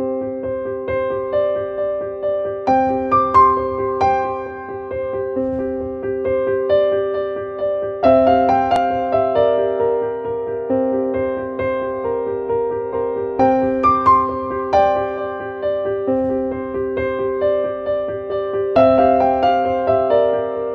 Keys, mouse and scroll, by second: 10.7-17.2 drag.